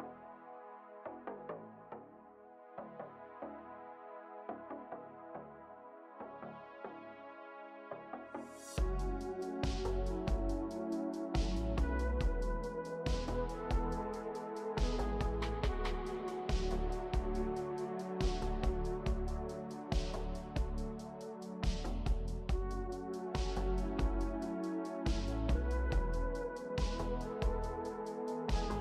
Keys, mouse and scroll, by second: 9.7 ctrl+shift+n, 28.1 l.